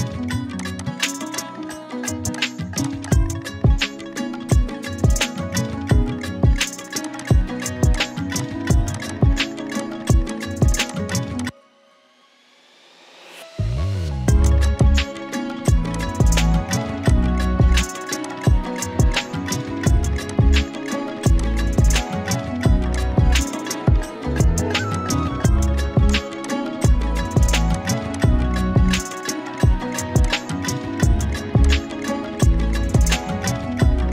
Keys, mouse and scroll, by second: 0.5 click, 4.2 Right, 7.0 click, 12.2 Right, 14.4 click, 17.1 shift+click, 17.8 shift+click, 23.7 Down, 24.9 click, 25.0-25.5 z, 26.0 space, 26.1 click, 26.3 z, 26.5 click, 26.8 space, 28.4-28.7 drag.